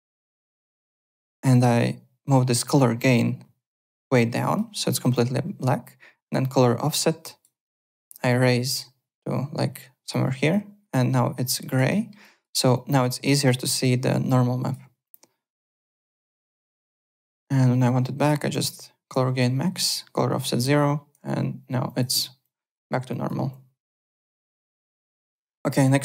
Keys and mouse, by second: 0.1 click, 6.5 click, 7.6 click, 10.9 click, 11.4 alt+click, 11.8 alt+middle click, 12.2 alt+click, 12.5 alt+right click, 12.7 alt+click, 13.8 alt+click, 15.0 alt+click, 16.2 m, 16.8 click, 18.5 click, 19.7 click, 21.8 click, 22.4 alt+click, 23.1 alt+click, 23.4 alt+Tab, 23.9 alt+click.